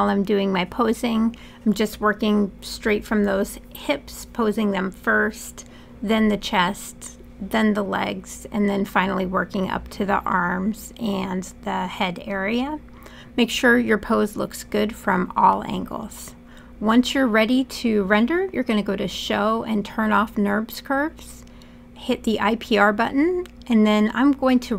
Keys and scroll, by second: 1.2 e, 1.6 w, 2.8 e, 4.5-7.0 typing, 8.8 w, 9.9 e, 10.5 w, 14.2 e, 16.7 w.